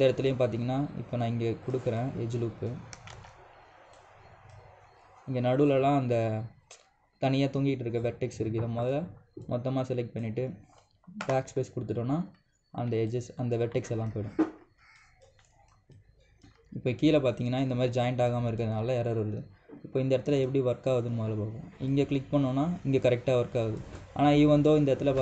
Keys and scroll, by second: 3.8 ctrl+z, 11.9 BackSpace.